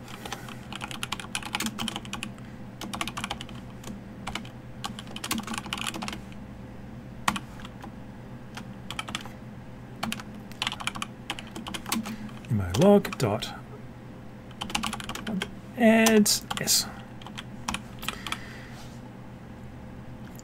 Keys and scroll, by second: 10.0 ctrl+shift+c, 11.9 ctrl+space.